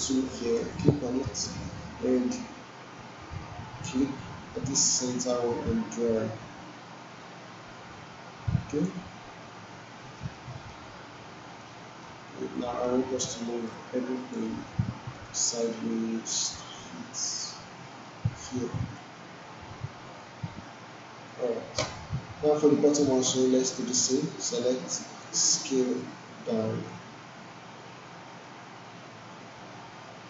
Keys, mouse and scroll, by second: 0.6 click, 4.0-9.0 drag, 10.3-10.9 alt+middle drag, 11.7-12.3 alt+middle click, 12.5 alt+right click, 13.7-14.6 drag, 20.2-21.5 drag, 22.9-23.8 drag.